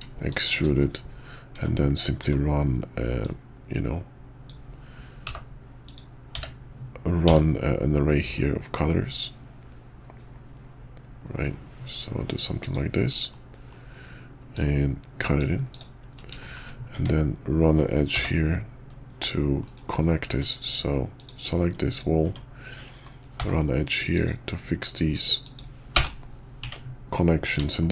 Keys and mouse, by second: 1.5 Tab, 2.2 Tab, 3.2-6.0 drag, 13.3 middle click, 16.4 shift+click, 16.9 Tab, 18.1 k, 20.3 Tab, 20.6 click, 21.1 click, 21.9 click, 22.2 Tab, 23.3 k, 26.6 Tab, 27.6 shift+click.